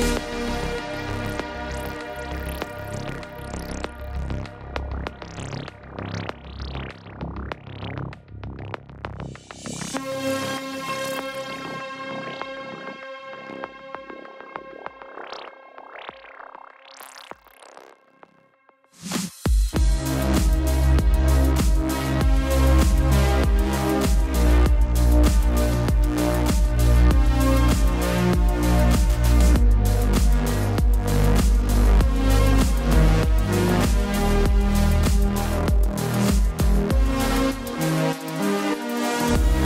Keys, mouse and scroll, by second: 5.9 click, 6.8 click, 11.8 alt+BackSpace, 14.0 BackSpace, 14.1 click, 16.2 typing, 31.5 typing, 34.2 -, 37.7 click.